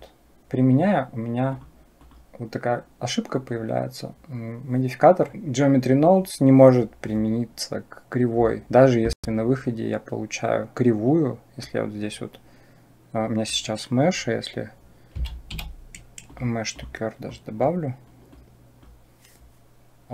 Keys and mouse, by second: 1.5-5.3 drag, 11.4-16.6 drag, 17.1 click, 18.1-18.7 drag, 20.0-20.1 drag.